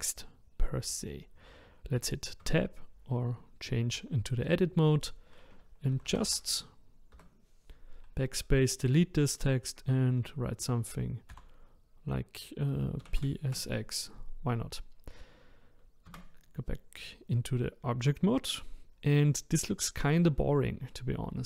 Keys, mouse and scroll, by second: 2.4 Tab, 5.9 BackSpace, 6.1 BackSpace, 6.3 BackSpace, 7.2 BackSpace, 11.4 shift+p, 13.0 shift+s, 13.2 shift+x, 16.0 Tab.